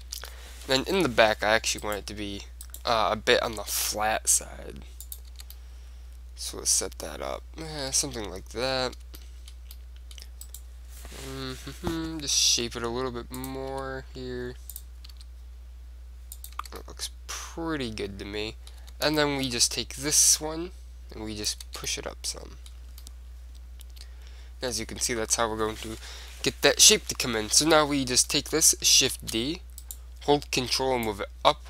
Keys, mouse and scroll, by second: 0.2 Tab, 0.5-3.4 middle drag, 1.0 KP_7, 1.9-3.4 drag, 3.4-4.4 right drag, 3.7 g, 5.3-7.1 drag, 5.4 Tab, 5.6-7.5 middle drag, 8.1 Tab, 9.3 middle click, 10.6-11.8 middle drag, 11.6 KP_7, 11.8 right click, 12.3 right click, 12.5 g, 13.6-18.5 drag, 13.8 r, 15.2 g, 16.7 Tab, 18.3 middle click, 18.9 Tab, 19.3 middle click, 20.5-22.4 drag, 21.8 Tab, 22.4-24.7 middle drag, 26.3 KP_1, 27.0-30.1 middle drag, 27.4 KP_1, 29.3 shift+d, 30.1 click, 30.1-31.6 right drag, 31.2-31.6 drag.